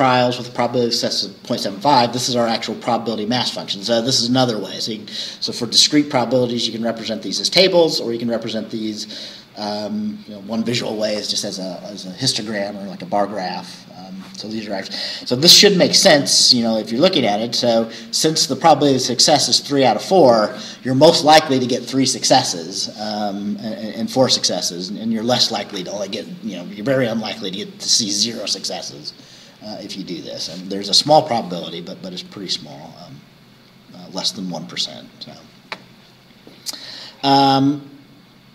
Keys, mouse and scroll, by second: 7.6-8.0 scroll down 2, 9.4 scroll down 2, 31.5-31.8 scroll up 2, 32.4 scroll up 2, 35.1 scroll down 2, 36.1 scroll down 2, 36.9-38.3 scroll down 6.